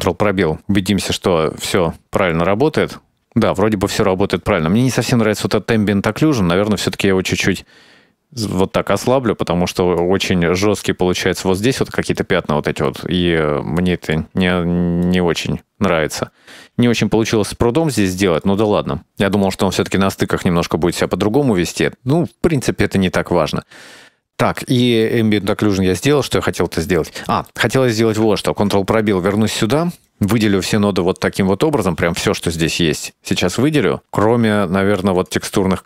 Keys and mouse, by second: 0.1 ctrl+space, 1.4 middle click, 1.9 click, 3.8-4.7 middle drag, 5.1-6.2 middle drag, 6.5 middle click, 6.7 middle click, 7.7 click, 10.7-11.7 middle drag, 12.3-13.0 middle drag, 13.9-14.3 shift+middle drag, 15.1-16.3 middle drag, 17.6-18.0 middle drag, 18.5-18.9 middle drag, 19.1 middle drag, 19.6-19.9 middle drag, 21.8-22.2 middle drag, 24.7 middle click, 27.6 middle click, 28.6 ctrl+space, 29.5 middle click, 30.1-30.8 right drag, 31.9-33.2 right drag, 33.7-34.3 middle drag, 34.8 right click, 35.5 click.